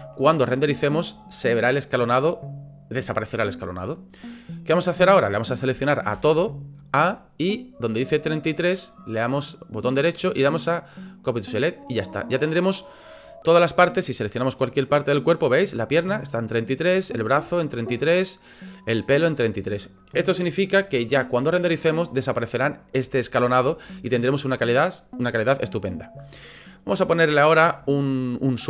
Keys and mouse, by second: 0.5 shift+middle click, 6.1 a, 8.7-11.4 drag, 12.2 click, 14.4 click, 17.0 click, 18.5 click, 23.6 shift+middle click.